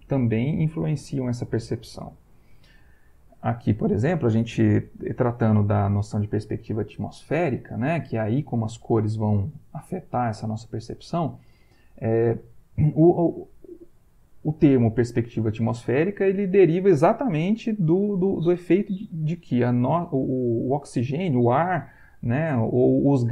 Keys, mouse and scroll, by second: 2.4 Right.